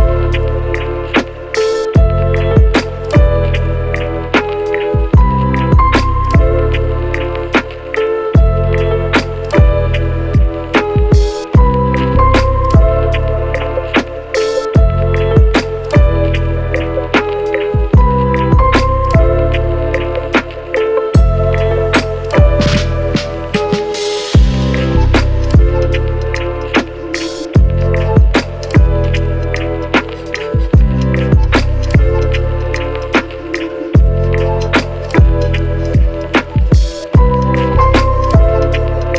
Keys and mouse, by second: 0.1 shift+d, 0.8 r, 1.8 shift+middle click, 2.1 g, 2.3 shift+middle click, 3.4 x, 3.5 shift+middle click, 3.9 shift+middle click, 4.6 shift+z, 5.0 click, 5.0 middle click, 5.0 right click, 5.9 KP_Divide, 5.9 shift+middle click, 6.9 Tab, 6.9 middle click, 7.4 shift+click, 7.6-11.1 typing, 7.8 Tab, 8.8 shift+click, 9.6 shift+middle click, 10.2 shift+middle click, 10.5 Tab, 11.4 shift+middle click, 12.1 middle click, 13.3 shift+click, 13.3 shift+z, 13.4 Tab, 13.9 middle click, 13.9 x, 14.0 ctrl+z, 14.0 ctrl+click, 14.4 middle click, 14.9 ctrl+q, 14.9 ctrl+click, 15.3 KP_Divide, 15.5 a, 15.8 shift+click, 16.0 shift+click, 16.5 shift+z, 17.2 shift+click, 17.2-18.8 shift+middle drag, 17.3 shift+z, 17.9 ctrl+s, 19.4 shift+middle click, 21.2 Tab, 21.2-22.8 typing, 21.7 Tab, 21.8 Tab, 22.4 Tab, 24.2 shift+click, 24.6 shift+click, 25.6 shift+click, 26.1-27.2 middle drag, 26.4 KP_Decimal, 27.0 Tab, 27.2 Tab, 27.8 Tab, 28.0 shift+s, 28.2 shift+a, 29.4-30.9 typing, 30.2-31.6 shift+drag, 31.8 Tab, 31.9 shift+middle click, 33.9 s, 35.1-37.0 shift+middle drag, 36.6 Tab, 36.8 shift+z, 36.8 a, 37.2 Tab, 37.3 shift+click, 37.3 shift+z, 38.1 Tab, 38.3 Tab, 38.4 ctrl+click, 38.5 ctrl+r.